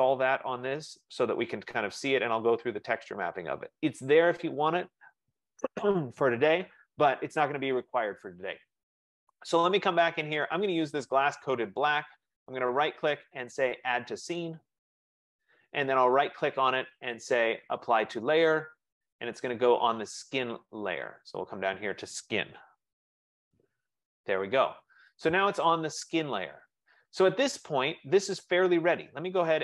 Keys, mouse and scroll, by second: 9.6 click, 12.2 right click, 14.4 click, 16.3 right click, 21.9 click.